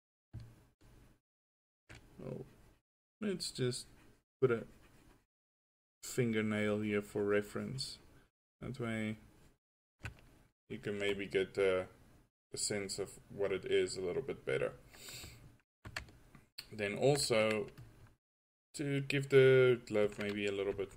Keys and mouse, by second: 1.0-4.1 drag, 14.1 drag, 14.4-15.6 drag, 20.8 f.